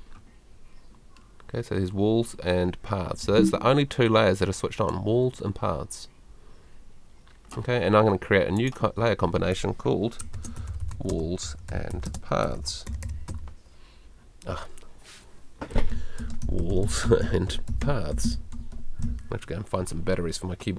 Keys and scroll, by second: 3.2 super+l, 3.2 k, 15.9-19.0 typing.